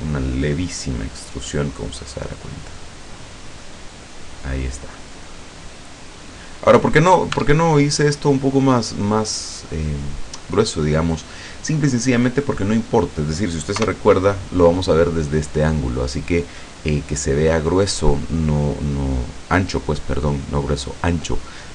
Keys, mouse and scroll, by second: 0.4 scroll down 1, 0.9-1.3 scroll up 1, 1.5-5.3 middle drag, 5.5 scroll down 1, 5.9-6.2 scroll up 1, 6.5 middle click, 7.3 Tab, 7.3 click, 8.3 scroll down 2, 8.9-9.3 scroll up 2, 13.9 KP_0.